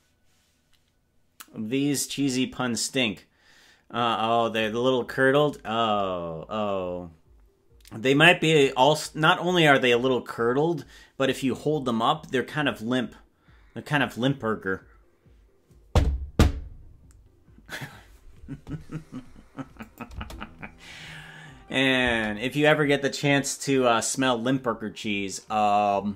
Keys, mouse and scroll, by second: 20.0-22.4 drag, 20.3 space, 22.3 space.